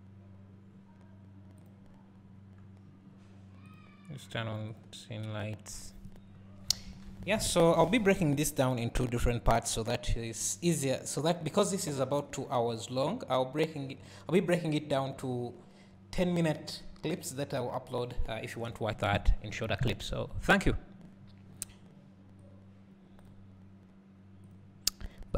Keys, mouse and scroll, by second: 2.2 scroll down 1, 2.6 scroll up 1, 4.7-7.5 drag, 7.5 alt+a.